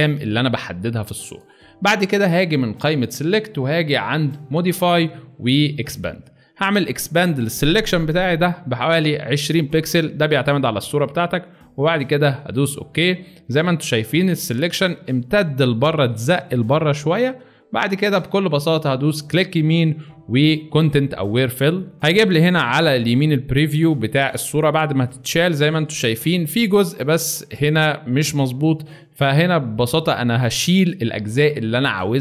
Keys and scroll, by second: 0.9 space, 18.2 alt+space, 28.9 space.